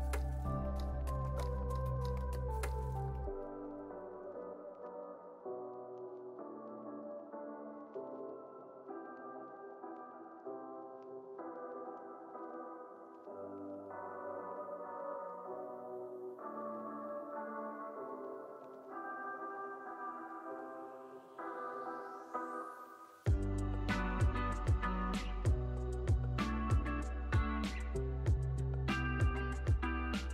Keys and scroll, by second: 10.1 super+s.